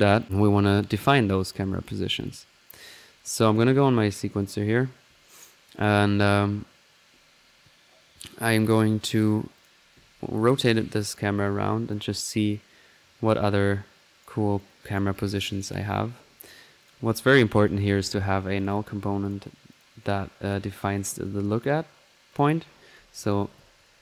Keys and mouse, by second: 0.2 click, 0.6-1.1 drag, 1.5-2.6 drag, 2.8 middle click, 3.5 click, 4.4 click, 5.2 middle drag, 5.8 click, 6.2 middle click, 6.3 click, 9.5 click, 10.9-12.0 drag, 13.5 right click, 14.7-15.8 right drag, 16.8-17.9 drag, 17.7-18.4 typing, 18.6-19.7 drag, 20.5-21.2 drag, 21.2 click, 22.3 click.